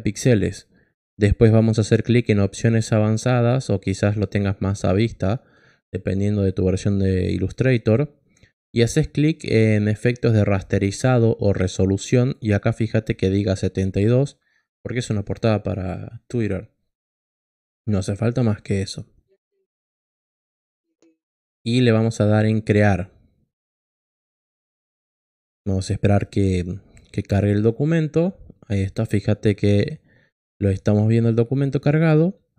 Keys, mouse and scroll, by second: 3.1 click, 12.1 click, 18.1 click, 22.5 click, 30.5 click.